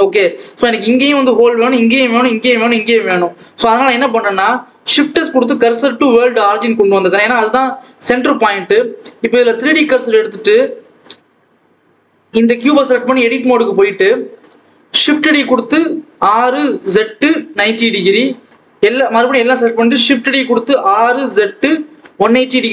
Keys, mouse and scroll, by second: 3.3 KP_7, 3.8 scroll down 1, 4.1-4.7 scroll up 1, 4.7 shift+s, 6.6-9.3 scroll down 1, 9.3-14.2 drag, 14.2 a, 14.8 shift+d, 15.8 r, 18.1 a, 19.9 shift+d, 20.7 r.